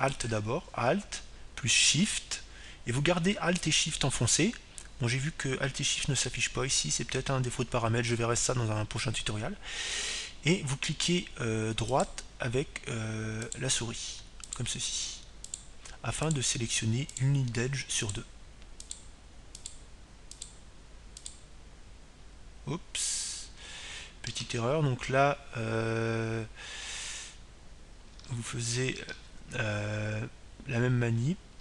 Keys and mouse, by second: 1.7-3.9 right drag, 13.6-25.2 right drag.